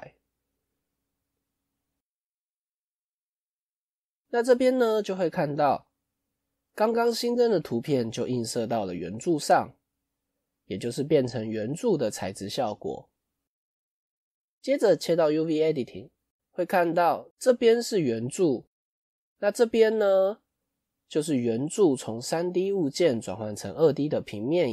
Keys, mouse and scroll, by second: 3.3-3.8 scroll up 4.